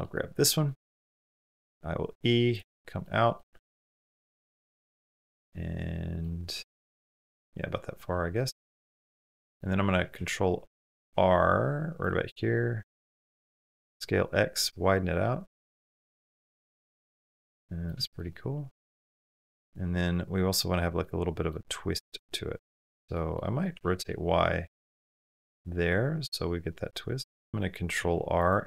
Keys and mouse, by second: 0.3 middle click, 0.8 click, 1.3 e, 2.9 click, 3.6 click, 3.7 middle click, 4.0 shift+middle click, 4.2 middle click, 5.1 shift+middle click, 5.4 middle click, 7.1 middle click, 8.5 middle click, 9.0 shift+middle click, 9.2 middle click, 10.0 ctrl+e, 11.0 ctrl+r, 13.2 click, 13.5 s, 16.0-17.7 middle drag, 17.9 shift+middle click, 18.1 middle click, 19.1-20.4 middle drag, 21.0 middle click, 22.6 shift+middle click, 23.2 middle click, 23.5 r, 25.1-26.8 middle drag, 26.8 click, 27.8 ctrl+r, 28.5-28.6 drag.